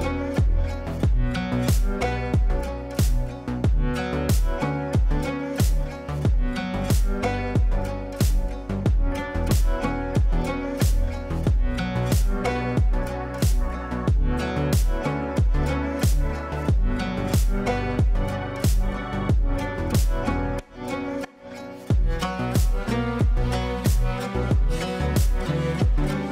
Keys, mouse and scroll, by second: 6.3 alt+click, 8.5-8.8 click, 11.4-11.7 click, 12.9 shift+Page_Down, 14.7-16.6 drag, 17.5-19.7 shift+drag, 24.6 shift+h.